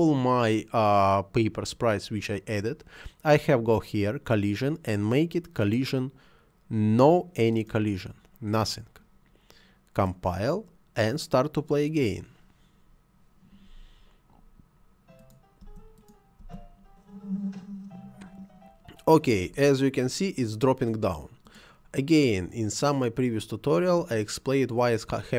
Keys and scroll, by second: 15.6 space, 19.3 Escape.